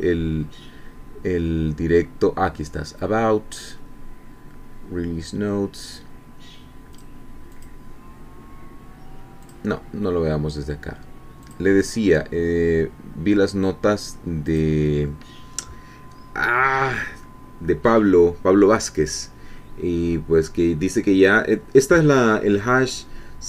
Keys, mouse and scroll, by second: 6.9 click, 7.6 click, 9.4 click, 11.4 click, 14.5 click.